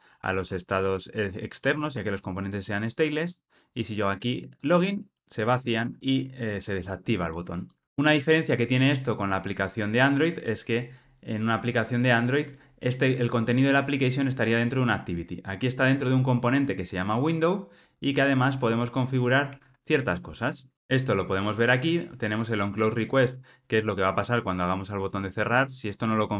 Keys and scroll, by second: 19.4 super+p.